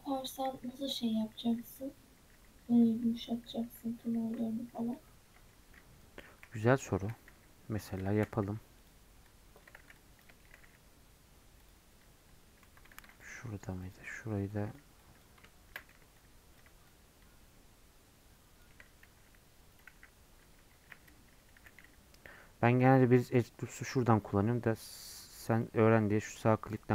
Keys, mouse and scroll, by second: 8.1-19.7 middle drag.